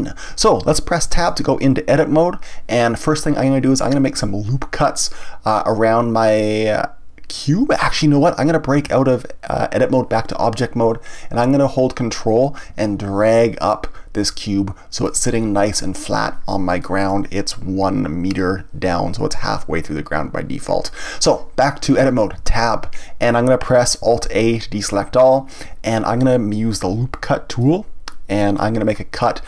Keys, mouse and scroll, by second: 1.2 Tab, 6.1-8.8 scroll down 1, 8.8 Tab, 13.2-15.4 ctrl+drag, 15.4-19.8 middle drag, 22.4 Tab, 24.2 alt+a, 25.3-27.6 shift+middle drag, 27.6-29.4 drag.